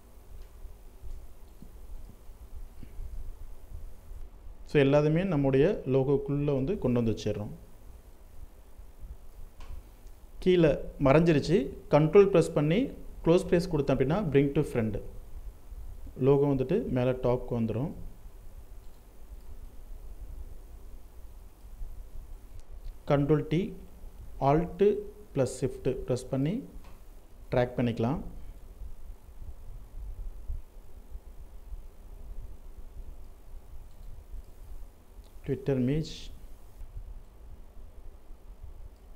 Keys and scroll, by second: 2.7 ctrl+t, 21.0 ctrl+t, 35.2 ctrl+t.